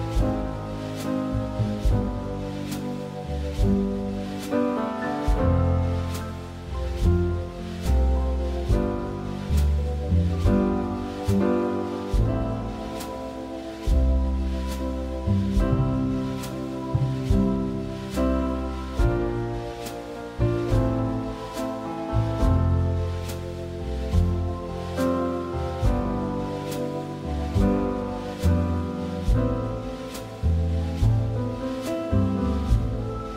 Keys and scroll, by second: 21.3 Escape, 24.0 Escape.